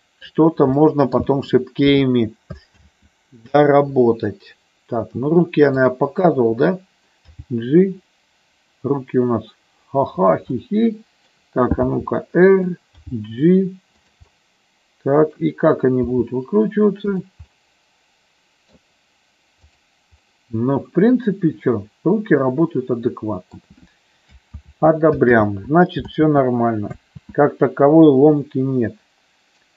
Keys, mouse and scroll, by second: 0.7 middle click, 1.2 KP_1, 3.0 ctrl+z, 5.8-6.9 drag, 7.4 g, 10.1 click, 10.5 middle click, 11.8 r, 12.6 click, 13.0 g, 14.0 click, 14.3-15.4 middle drag, 16.1 r, 17.1 click, 17.5-18.7 middle drag, 19.6 click, 20.2-23.5 middle drag, 24.9 ctrl+z, 25.6 ctrl+z, 26.4 ctrl+z, 27.2 ctrl+z.